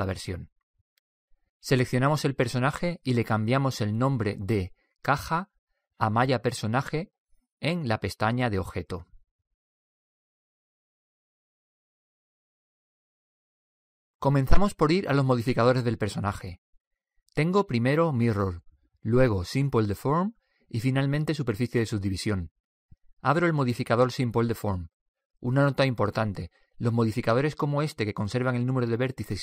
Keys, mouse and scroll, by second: 0.0-1.6 drag, 4.2-7.3 drag, 7.0 l, 11.0 typing, 16.3-19.1 drag, 24.1-26.9 drag.